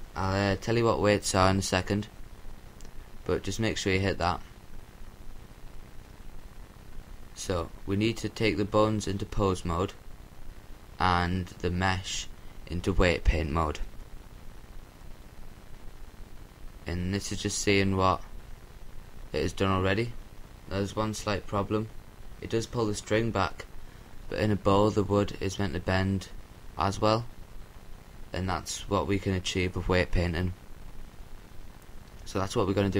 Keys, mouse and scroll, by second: 3.8-5.4 right drag, 5.4-9.5 drag, 11.2-12.4 drag, 13.6-15.0 scroll down 1, 15.0-16.1 middle drag, 16.1-16.9 scroll up 1, 16.4 a, 18.0-19.8 right drag, 19.8-21.3 drag.